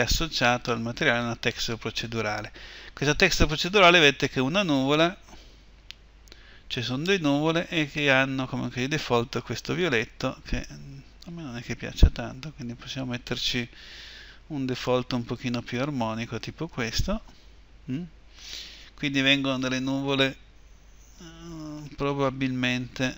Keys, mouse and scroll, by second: 11.2-12.2 drag.